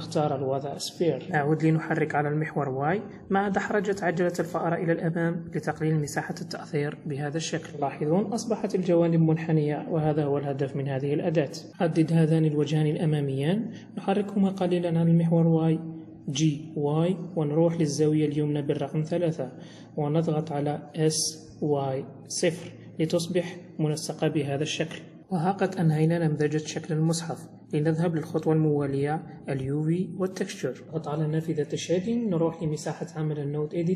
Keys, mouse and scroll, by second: 4.5-4.9 scroll down 2, 4.9 middle click, 5.8-6.1 scroll down 1, 6.1 middle click, 8.3 3, 9.9 click, 11.0 click, 12.3 shift+click, 12.9 middle click, 13.9 g, 16.9 KP_1, 18.0 KP_3, 19.3 scroll up 3, 20.5 s, 23.1-23.6 scroll down 4, 23.7 middle click, 25.0 middle click, 26.8 middle click.